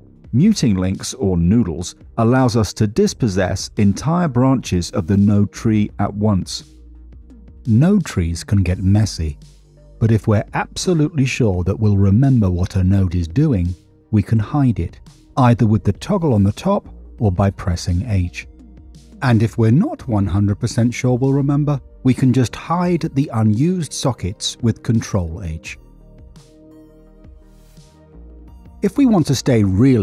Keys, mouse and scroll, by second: 0.4 middle click, 1.1 middle click, 3.7 ctrl+alt+right click, 7.2 middle click, 8.1 middle click, 12.1 click, 13.2 click, 14.2 click, 16.1 h, 16.9 click, 17.3 h, 18.1 click, 18.7 h, 19.7 middle click, 20.4 middle click, 23.5 click, 24.0 ctrl+h, 25.0 click, 25.5 ctrl+h, 26.7 click, 27.1 ctrl+h, 29.7 middle click.